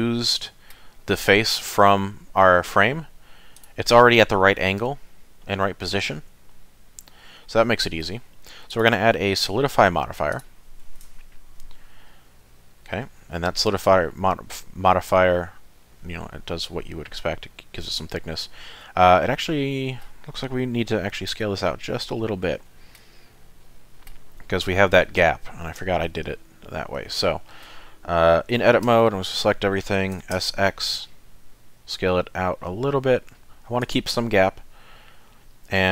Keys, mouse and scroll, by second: 1.5 click, 3.6 click, 3.9 middle click, 7.4 middle click, 8.7 click, 11.5 scroll up 2, 12.1 middle click, 19.1 middle click, 21.3 Tab, 21.8 middle click, 22.7 shift+middle click, 23.2 middle click, 25.8 KP_7, 26.6-27.0 scroll up 1, 27.0 shift+middle click, 28.9 a, 30.2 s.